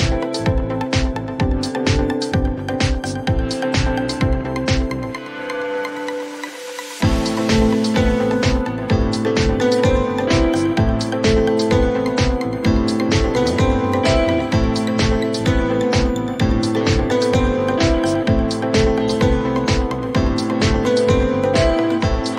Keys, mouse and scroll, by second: 2.0 click, 2.5-3.6 typing, 3.1-5.4 drag, 6.0 click, 6.3-7.0 typing, 9.4 click, 11.1 click.